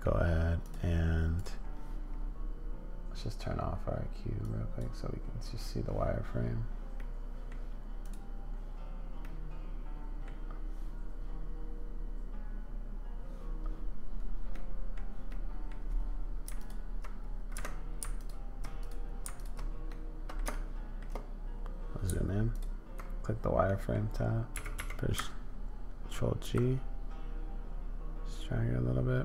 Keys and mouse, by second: 1.4 click, 4.4 click, 6.9 middle click, 9.2-10.2 middle drag, 14.5 middle click, 15.3 middle click, 16.6 super+middle click, 18.2 alt+click, 18.8 click, 19.9 middle click, 20.5 shift+middle click, 20.6 shift+click, 22.5 alt+click, 23.6 click, 24.5 g.